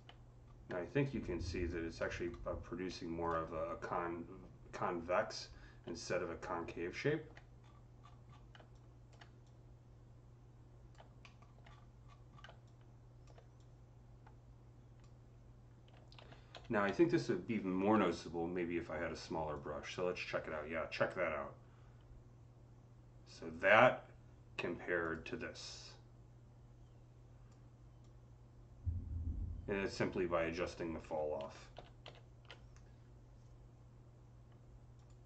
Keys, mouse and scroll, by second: 0.3 scroll up 2, 0.8-5.9 alt+drag, 1.9 alt+middle click, 2.7-7.5 alt+middle drag, 5.9-7.5 alt+drag, 7.5-7.9 scroll up 4, 7.9 scroll down 5, 8.7-11.5 alt+drag, 11.1 middle click, 11.3 scroll down 1, 11.5-11.9 alt+scroll up 6, 11.9-12.5 scroll down 7, 12.5-17.8 alt+drag, 16.4 z, 17.6-19.0 typing, 18.1 click, 19.4-25.5 drag, 25.5-34.1 drag, 31.3 z, 33.7-34.8 typing, 34.8 click.